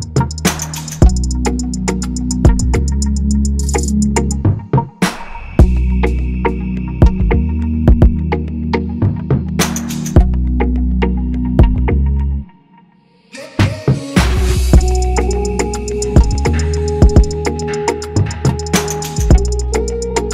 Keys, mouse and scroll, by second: 5.1 click, 6.6 click, 8.0 right click, 8.9-10.4 drag, 10.9 click, 12.6 click, 13.1 click, 13.4-14.9 drag, 15.4 click, 15.8 s, 16.5 click, 17.5 click, 17.9 click, 19.0 click.